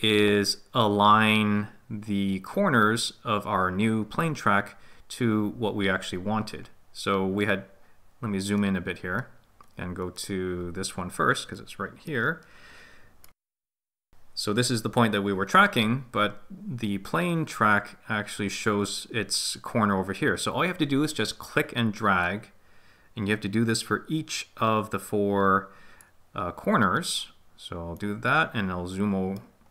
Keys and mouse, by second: 12.1-13.2 middle drag, 22.2 click, 22.7-25.4 drag, 28.0-29.4 middle drag.